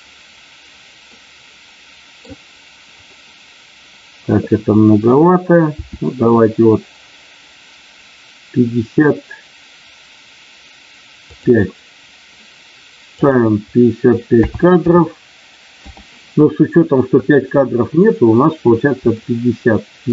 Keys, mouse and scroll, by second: 1.3 middle click, 11.2 click, 13.1-15.9 drag, 19.1 shift+middle click.